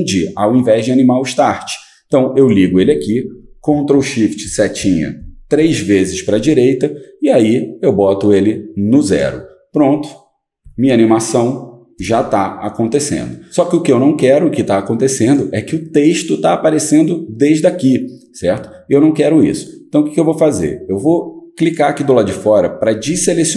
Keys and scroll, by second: 4.4 ctrl+shift+Right, 4.8 ctrl+shift+Right, 10.6 Home.